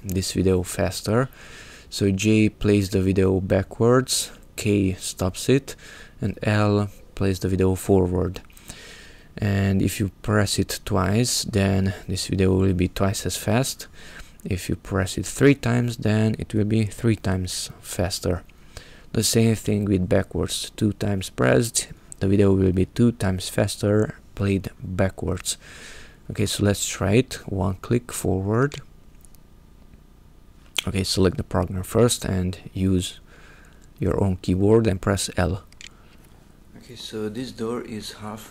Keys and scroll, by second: 1.1-2.5 typing, 3.9 k, 5.6 l, 9.9 l, 13.8 ', 14.0 ;, 15.2 l, 18.9 j, 19.6 j, 20.5 j, 21.9 j, 28.5 l, 35.6 l.